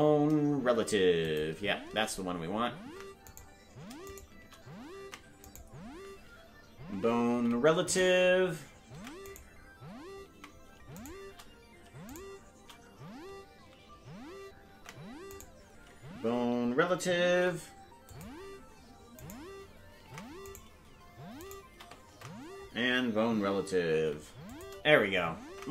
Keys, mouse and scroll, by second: 3.3 ctrl+Tab, 3.3 right click, 4.1 shift+right click, 5.0 ctrl+Tab, 5.5 right click, 7.3 ctrl+p, 8.9 ctrl+Tab, 9.3 right click, 12.1 shift+right click, 14.7 ctrl+Tab, 15.4 right click, 17.3 ctrl+p, 19.2 right click, 20.0 ctrl+Tab, 20.5-22.1 right drag, 22.1 ctrl+Tab, 23.9 ctrl+p, 25.5 ctrl+Tab.